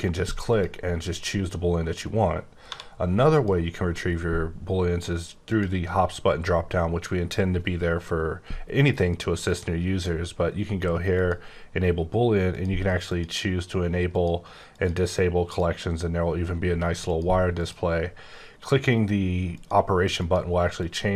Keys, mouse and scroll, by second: 0.5 click, 2.6 1, 3.3 click, 5.4 click, 9.4 click, 11.1 click, 12.5 click, 14.1 click, 14.7 click, 17.0 click, 17.5 click, 18.6 click, 20.1 click, 20.7 click.